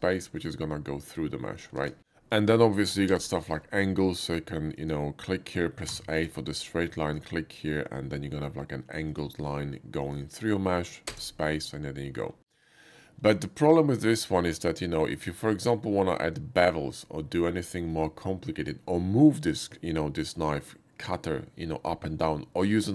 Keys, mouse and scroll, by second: 0.0 middle click, 1.4 middle click, 1.8 ctrl+z, 3.0 k, 5.8 a, 7.0 click, 8.4 a, 9.1 click, 10.0 click, 11.1 space, 11.4 middle click, 11.7 middle click, 12.5 middle click, 14.7-16.5 middle drag.